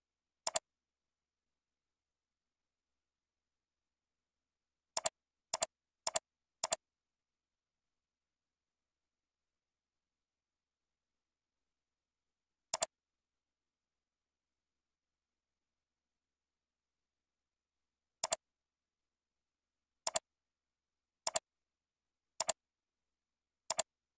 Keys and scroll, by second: 2.4 ctrl+z, 11.1 ctrl+Down.